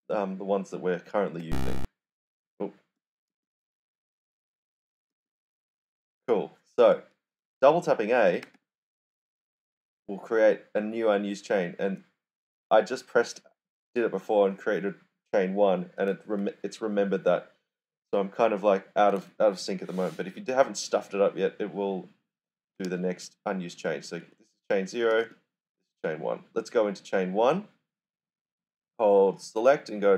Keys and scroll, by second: 1.3 ., 2.7-3.7 typing, 4.9-5.6 typing, 8.4 ., 10.6 typing, 22.5-25.5 typing, 29.9-30.1 typing.